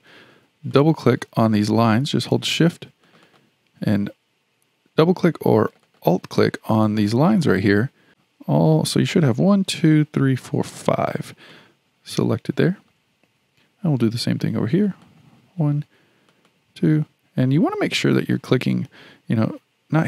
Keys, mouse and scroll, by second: 0.7 click, 0.9 click, 1.9 shift+click, 3.0 shift+click, 3.3 shift+click, 5.7 shift+click, 5.9 shift+click, 7.1 shift+click, 7.3 shift+click, 8.1 shift+click, 11.5-14.7 shift+middle drag, 14.8 shift+click, 15.1 shift+click, 16.3 shift+click, 16.5 shift+click, 17.5 scroll up 4, 17.9-20.0 shift+middle drag.